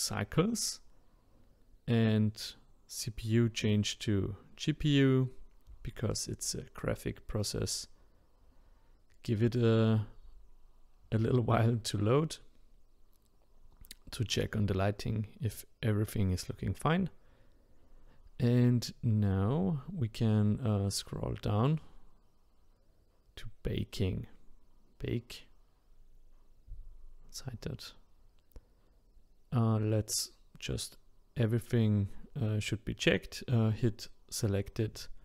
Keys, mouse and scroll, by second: 32.6-35.2 drag.